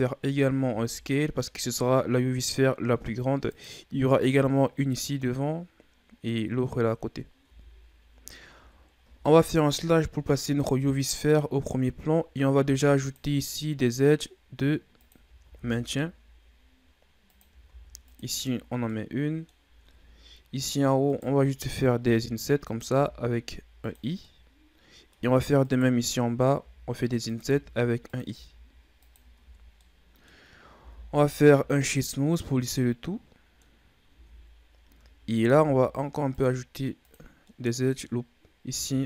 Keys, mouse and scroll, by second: 0.6 s, 7.4 Tab, 8.6 Tab, 9.7 KP_Divide, 11.1-11.9 scroll down 4, 11.9-12.6 scroll down 1, 12.6 ctrl+r, 15.4 ctrl+r, 17.6 ctrl+r, 18.8-19.9 middle drag, 19.9 ctrl+Tab, 21.1 right click, 22.0 i, 22.9 i, 24.2-25.6 middle drag, 25.6 right click, 26.6 i, 27.5 i, 28.3 i, 29.4 Tab, 29.8-30.7 middle drag, 30.7 w, 32.8-33.8 middle drag, 33.8 scroll up 2, 34.1 Tab, 35.5 ctrl+r, 37.5-39.0 middle drag.